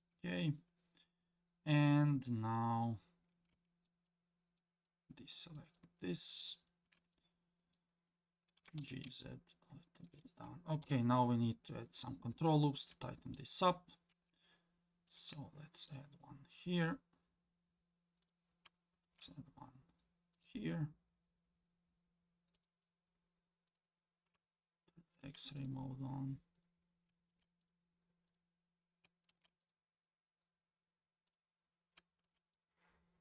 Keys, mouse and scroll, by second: 3.9 ctrl+click, 4.6 ctrl+click, 5.5 ctrl+click, 6.5 ctrl+click, 7.1 scroll up 1, 7.1 middle click, 8.1 scroll down 1, 8.6 g, 10.8 KP_7, 11.7-12.9 scroll up 2, 13.0 shift+middle click, 15.1 ctrl+r, 19.0 ctrl+r, 23.7 click, 25.2 ctrl+r, 27.3 ctrl+r, 32.2 ctrl+r.